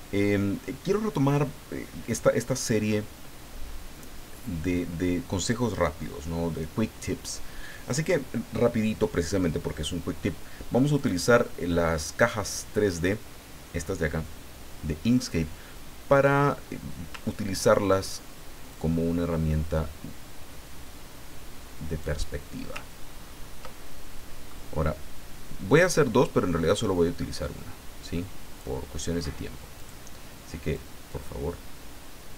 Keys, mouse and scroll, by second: 11.0 click, 18.7-22.2 drag, 23.0-23.6 ctrl+scroll up 2, 23.8 ctrl+middle click, 25.8-28.9 drag, 29.8 click, 30.7-32.3 drag.